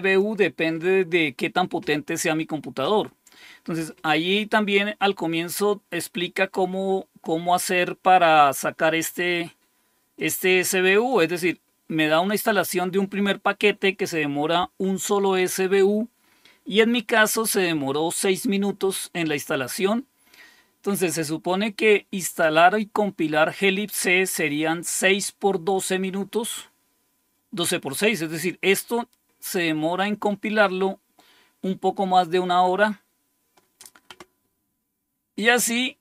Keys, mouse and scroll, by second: 8.2 click, 10.1 click, 11.4 click, 35.3 click.